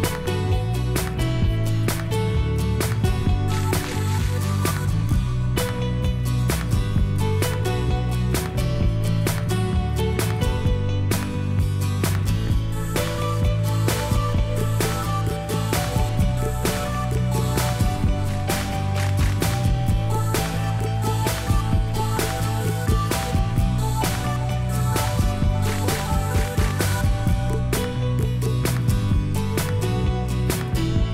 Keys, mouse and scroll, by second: 8.7 m, 11.8 s, 17.3 m, 20.8 o, 22.4 o, 22.4 m.